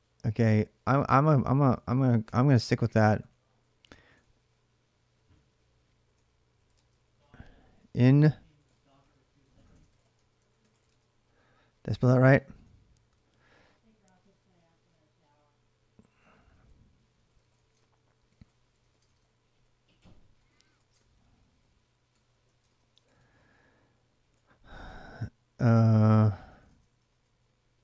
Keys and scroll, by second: 1.7 ctrl+a, 2.0 2, 2.7 ctrl+[, 2.8 ctrl+j, 3.1-27.5 typing, 25.7 ctrl+[, 25.7 ctrl+j.